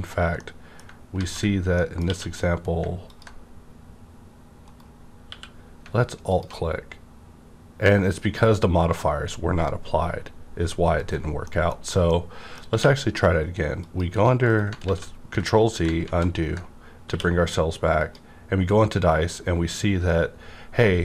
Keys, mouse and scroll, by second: 0.3-1.7 middle drag, 1.2 ctrl+z, 2.0 q, 2.8 middle click, 3.0 ctrl+click, 4.6 right click, 5.3 q, 6.2 click, 11.0 right click, 11.0 alt+click, 11.5 middle click, 11.7-12.1 scroll down 2, 12.1-13.8 middle drag, 12.7 q, 13.8 click, 14.5 right click, 14.8 ctrl+z, 16.0 ctrl+z, 17.0 q, 17.9 click, 18.7 scroll up 1, 19.1-19.4 scroll down 1, 19.4-19.8 scroll up 1, 19.8-20.1 scroll down 1, 20.1 scroll up 1.